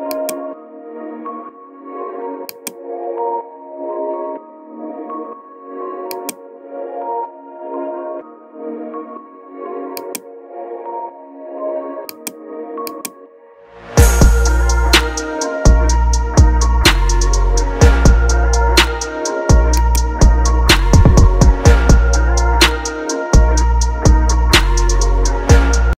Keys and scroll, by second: 1.2 ctrl+KP_Add, 3.3 ctrl+KP_Add, 4.7 ctrl+KP_Add, 17.5 ctrl+KP_Subtract, 19.5 space.